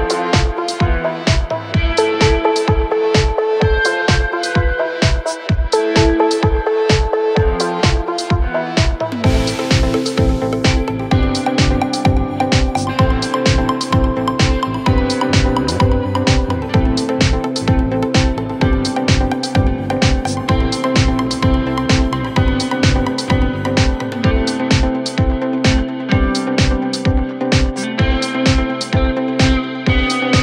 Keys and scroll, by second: 7.4 F3, 14.1 ctrl+z, 14.5 F3, 14.8 Escape, 17.8 shift+Page_Up.